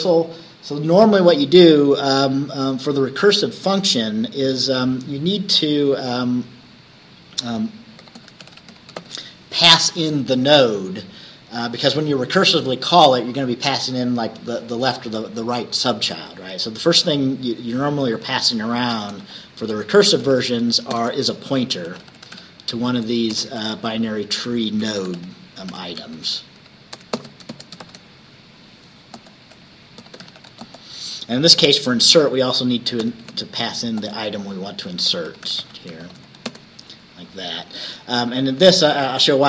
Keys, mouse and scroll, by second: 0.0-2.6 drag, 2.8-6.9 drag, 7.0-8.1 drag, 7.9-9.6 typing, 18.9-23.4 typing, 24.8-31.1 typing, 33.2-36.8 typing, 37.5 Up, 38.7 Left, 39.0 Right.